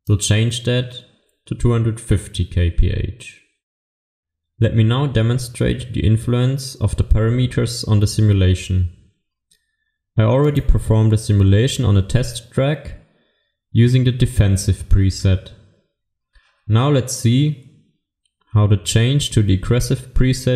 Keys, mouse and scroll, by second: 10.5 click.